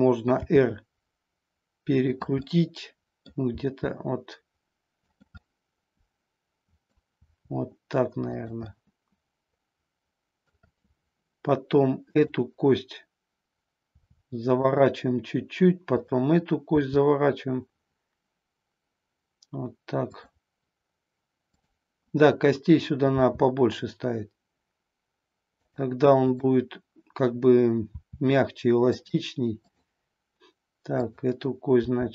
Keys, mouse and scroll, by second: 0.4 r, 2.1 click, 2.5 middle click, 3.6 r, 5.1 click, 5.5-6.9 middle drag, 7.2 r, 8.4 click, 8.7-10.5 middle drag, 12.0-13.4 drag, 14.0 r, 14.6 click, 21.5-22.6 drag, 23.0 r, 25.6 drag, 26.3-27.3 drag, 27.9 r, 29.0 click, 29.8-30.9 drag, 31.1-32.1 drag.